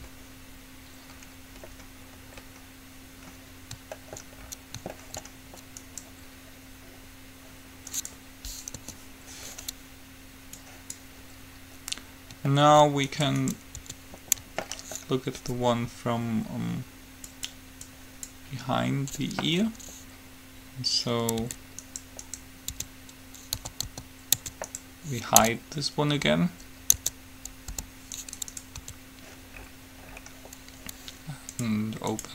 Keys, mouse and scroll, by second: 0.0 Return, 0.7-2.0 middle drag, 6.0-7.9 right drag, 9.0 KP_3, 9.5-10.8 middle drag, 10.8 click, 13.3 right click, 14.0 Tab, 18.1-19.9 drag, 21.6 Tab, 22.0-23.9 right drag, 23.0 Tab, 23.9 a, 24.0 a, 24.6 Tab, 24.9-26.8 right drag, 25.5 Tab, 27.1 Tab, 28.0 h, 28.4-29.5 right drag, 29.0 Tab, 31.7 click.